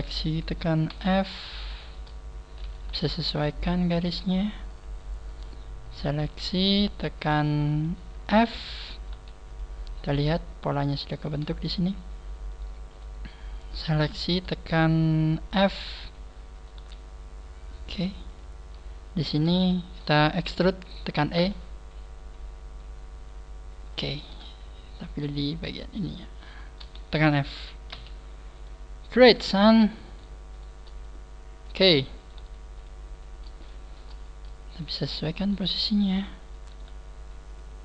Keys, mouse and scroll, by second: 0.9 f, 1.6 shift+middle click, 2.6 right click, 2.8 g, 3.4 click, 4.0 right click, 4.2 g, 4.7 click, 5.2 right click, 5.8 shift+right click, 6.6 shift+right click, 7.2 shift+right click, 8.3 f, 9.0 shift+right click, 9.1 g, 9.5 click, 9.9 scroll up 1, 10.0-10.5 scroll down 6, 10.9 shift+middle click, 11.6 scroll up 2, 13.3 shift+right click, 13.6 shift+right click, 15.6 shift+right click, 15.6 f, 16.6 right click, 16.8 g, 18.4 click, 18.7 scroll up 3, 19.2 right click, 19.6 shift+right click, 24.2 click, 24.2 right click, 25.0 shift+right click, 25.5 shift+right click, 26.4 shift+right click, 27.9 f, 28.6 right click, 29.5 scroll down 2, 30.0 right click, 30.5 shift+right click, 31.0 click, 32.2 shift+right click, 32.3 g, 32.8 click, 33.2 scroll down 3, 33.6 shift+middle click, 34.2 scroll up 2, 35.0 scroll up 2, 35.4 right click, 35.5 g, 36.2 click, 36.5 right click.